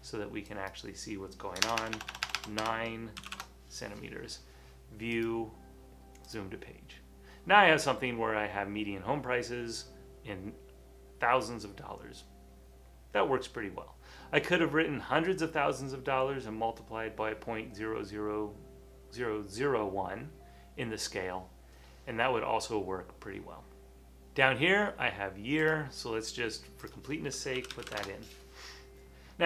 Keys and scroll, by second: 1.8-3.8 typing, 27.4-28.3 typing.